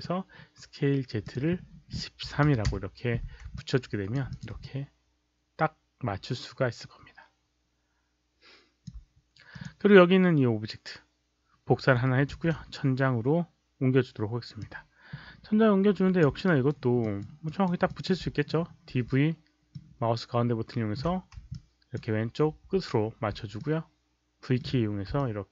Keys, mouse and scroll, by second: 1.1 click, 2.2 KP_1, 2.4 KP_3, 2.6 Return, 3.5 alt+click, 4.2 click, 4.6-8.8 alt+drag, 8.2 Return, 8.2 alt+right click, 8.2 KP_3, 8.2 KP_1, 9.4 click, 12.2 ctrl+d, 14.5-16.1 drag, 16.5 ctrl+d, 16.5 alt+right click, 16.9 alt+middle click, 17.4 alt+right click, 17.8 alt+middle click, 18.6-19.5 typing, 19.6-20.8 middle drag, 21.4 alt+click, 23.2 v, 23.5-24.5 middle drag, 25.1 alt+click.